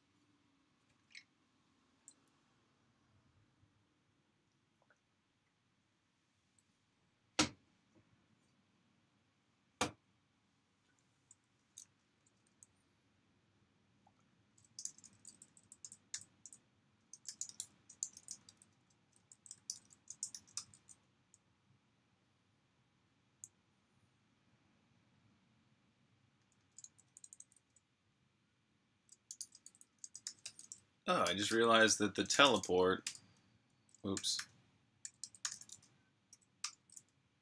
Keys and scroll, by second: 12.3 j, 14.6-16.3 typing, 17.4-19.9 typing, 22.7-23.4 typing, 25.2-27.7 typing, 28.9-31.1 typing, 32.3 typing, 33.9-36.2 typing, 37.2-37.4 typing.